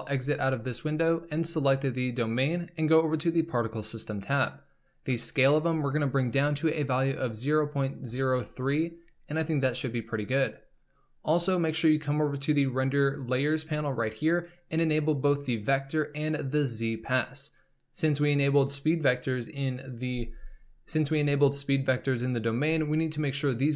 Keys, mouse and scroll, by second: 1.3 click, 3.4 click, 5.2-8.4 drag, 12.0 click, 15.5 click, 16.5 click.